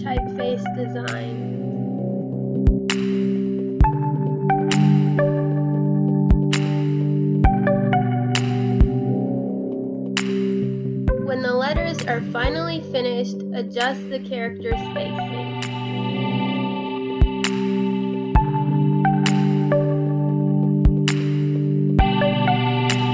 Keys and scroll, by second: 1.1 Delete, 1.8 Delete, 2.2 space, 4.3 space, 4.7 space, 5.6 Delete, 5.9 space, 7.1 space, 7.3 space, 7.6 space, 13.0 space, 14.7 space, 17.7 space, 18.6 space, 19.0 space, 21.6 space, 22.8 space.